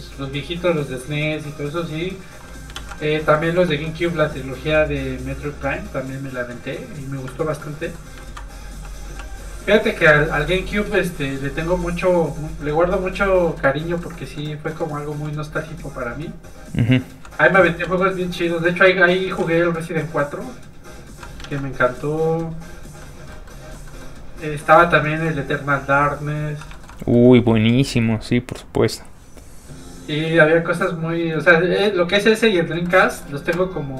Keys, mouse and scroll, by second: 0.6 middle click, 1.4 click, 2.7 ctrl+z, 3.2 z, 3.3 middle click, 3.5 f, 3.6 click, 3.8 middle click, 4.7 click, 7.6 middle click, 8.2 ctrl+z, 8.7 z, 8.8 click, 9.1 f, 9.3 click, 10.4 shift+middle click, 11.2 middle click, 11.9 click, 13.6 middle click, 15.1 f, 15.2 click, 17.5 ctrl+z, 18.0 ctrl+click, 19.2 ctrl+z, 19.6 scroll down 1, 19.8 f, 20.0 click, 21.4 ctrl+z, 21.8 click, 21.9 click, 23.0 middle click, 24.6 ctrl+z, 25.2 click, 25.2 f, 26.7 shift+middle click, 26.9 scroll up 1, 27.0 middle click, 30.4 click, 32.8 shift+middle click, 33.1 middle click.